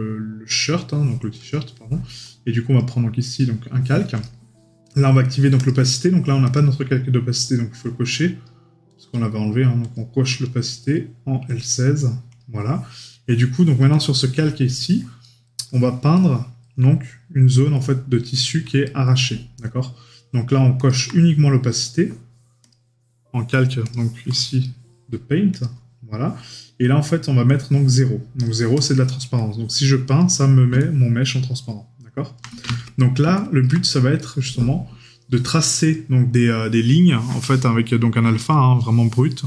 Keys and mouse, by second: 4.2 right click, 15.2 right click, 15.7 middle click, 16.1 right click, 17.7 middle click, 18.4 right click, 24.6 right click, 34.2 right click.